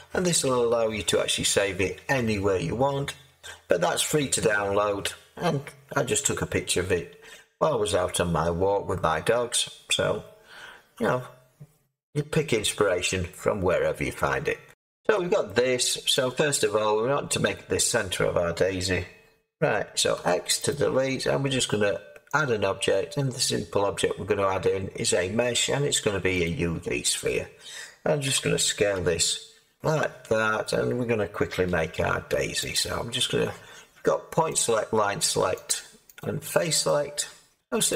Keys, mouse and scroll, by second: 15.8 middle click, 16.2-17.5 drag, 17.5-20.6 middle drag, 20.1 x, 20.6-27.2 drag, 27.2-29.8 middle drag, 28.2 s, 28.9 z, 29.8 click, 30.6-31.6 middle drag, 31.6 Tab, 32.7-37.9 drag.